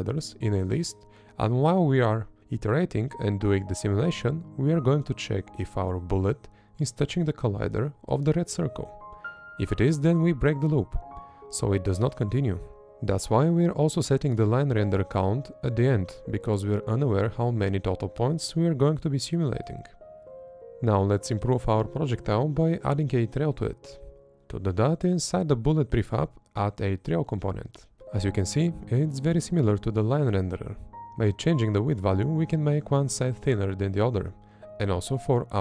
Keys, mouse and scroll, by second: 0.2 Left, 1.2 Left, 3.0 Right, 3.4 Right, 4.0 Right, 4.9 Right, 6.2 Left, 7.4 Left, 7.9 Left, 8.5 Left, 9.6 Right, 12.0 Left, 13.7 Left, 14.7 Up, 20.5 Left, 21.7 Right, 23.3 Up, 25.6 Left, 26.2 Right, 29.1 Up, 30.8 Up, 31.7 Up, 32.9 Up, 34.1 Up, 35.3 Up.